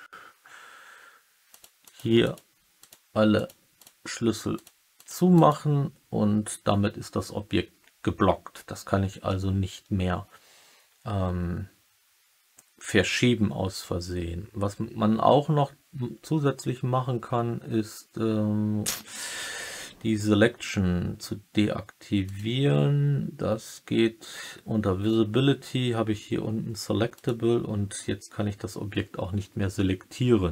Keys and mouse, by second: 1.4 click, 1.8 click, 2.2 click, 2.7 click, 3.3 click, 3.7 click, 4.5 click, 4.9 click, 5.3 click, 22.3 click, 27.1 click.